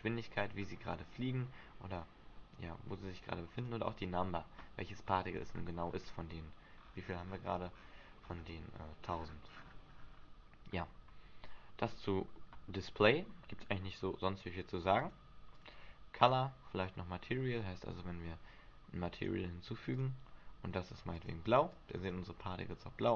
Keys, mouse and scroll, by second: 0.7 scroll down 5, 3.8 click, 4.7-5.3 scroll down 6, 5.2-6.5 scroll up 15, 6.9-9.0 scroll up 16, 9.3 scroll down 1, 10.0-11.9 scroll down 12, 15.1 click, 15.7 click, 17.4-18.0 scroll down 10, 18.0-18.3 scroll up 3, 19.3 click, 20.0 click, 22.8 click.